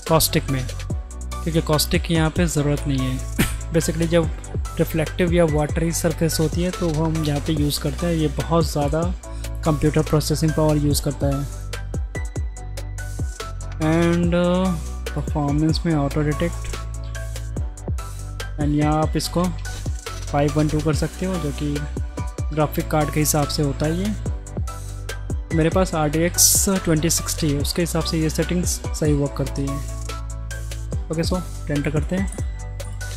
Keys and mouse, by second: 12.8 click, 15.1 click, 18.5-19.6 drag, 24.6 middle click, 25.5 shift+click, 29.3 middle drag, 29.9 shift+middle click, 30.7 middle click, 32.3 click.